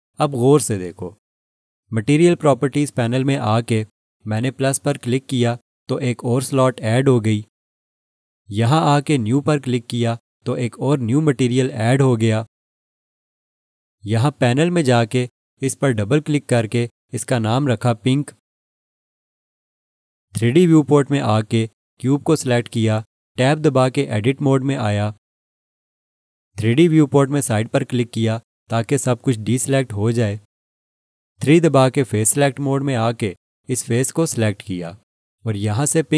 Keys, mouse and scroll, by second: 6.4 click, 10.6 click, 16.6 click, 16.8 double click, 19.0 shift+p, 19.4 n, 20.1 k, 22.7 click, 28.3 click, 32.9 3, 34.2 click.